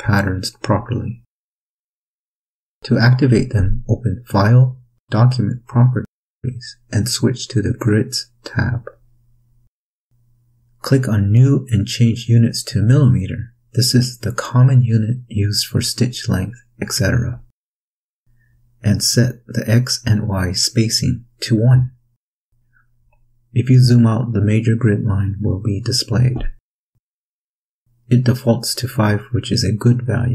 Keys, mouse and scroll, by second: 3.5 click, 5.0 click, 7.5 click, 10.8 click, 12.6 click, 13.7 click, 18.1 click, 19.7 1, 20.5-21.1 drag, 21.0 1, 21.8 Return.